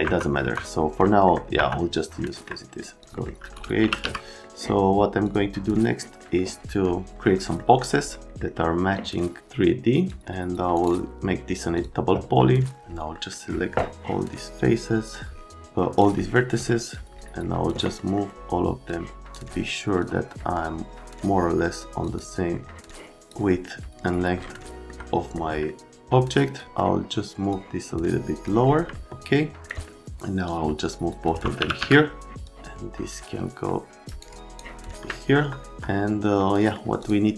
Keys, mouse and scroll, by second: 0.1 F3, 0.4 F3, 1.0 middle click, 1.6 F3, 2.2 middle click, 3.0 click, 3.1 middle click, 3.5 click, 3.7 r, 4.0 z, 4.2 right click, 5.2 click, 6.1 right click, 7.6 right click, 8.3 right click, 9.4 click, 10.7 scroll, 11.8 click, 13.1 middle click, 14.0 click, 15.5 click, 16.6 click, 18.0 right click, 18.9 click, 20.0 click, 21.1 middle click, 22.1 middle click, 22.9 middle click, 24.6 right click, 24.8 middle click, 25.3 middle click, 25.7 middle click, 26.6 click, 26.7 right click, 27.5 click, 28.9 right click, 29.7 right click, 30.5 click, 31.3-32.3 typing, 32.4 click, 34.1 right click, 34.4 click, 35.1 right click, 35.7 right click, 36.5 right click, 37.0 middle click.